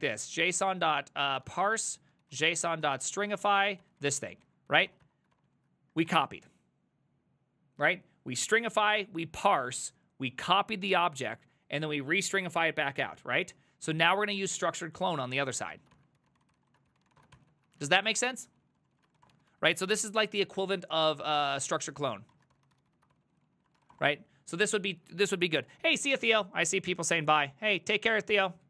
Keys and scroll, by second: 0.0-6.5 typing, 5.4 ctrl+c, 14.2 ctrl+c, 14.5-27.6 typing, 18.7 ctrl+c, 23.9 Return.